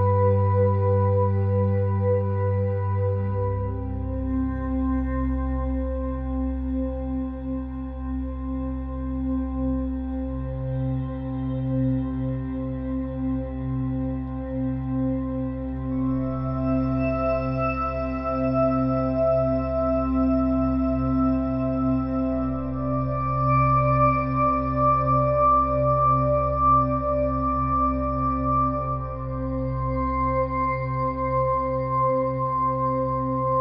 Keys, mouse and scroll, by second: 0.3 click, 0.8 middle click, 1.3 s, 2.0 click, 2.5 middle click, 2.8-4.4 drag, 4.4 middle click, 4.9 middle click, 5.1 KP_1, 5.6-6.8 drag, 7.0-8.4 middle drag, 7.6 Tab, 8.6-9.7 drag, 9.3 x, 9.7 middle click, 9.9 click, 10.1 x, 10.3 Tab, 10.8 Tab, 11.2-12.2 drag, 12.0 a, 12.4 click, 13.2 Tab, 14.7 Tab, 15.5 click, 16.7 KP_1, 17.1 middle click, 17.6-18.8 drag, 18.9 click, 19.6-24.0 typing, 24.9 click, 25.6 KP_1, 26.2 middle click, 26.7 ctrl+KP_Add, 27.6 ctrl+KP_1, 28.3 middle click, 29.0 middle click, 29.1 click, 29.5 middle click, 29.7 KP_1, 29.8 middle click, 30.4 e.